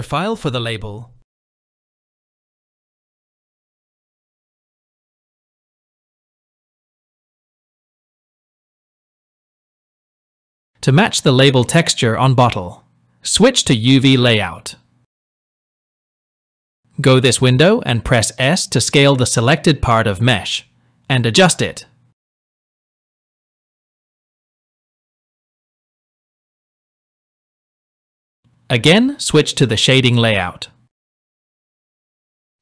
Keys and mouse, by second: 11.2-11.9 shift+drag, 14.1 click, 24.5 shift+middle click, 31.3 click.